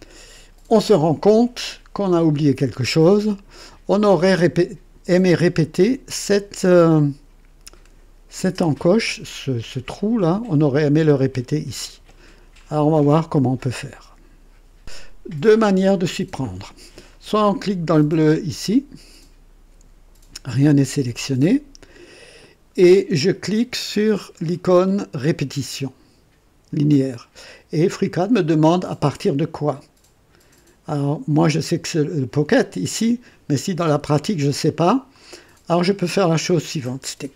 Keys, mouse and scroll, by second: 14.8 click, 18.6 click, 26.7 click, 35.1 click.